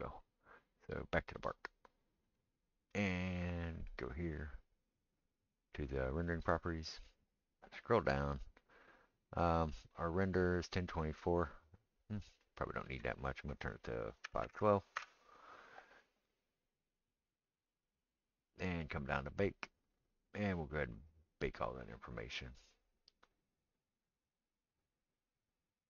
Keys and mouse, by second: 1.2-2.3 middle drag, 2.3 click, 2.4-13.0 middle drag, 13.0-25.8 drag.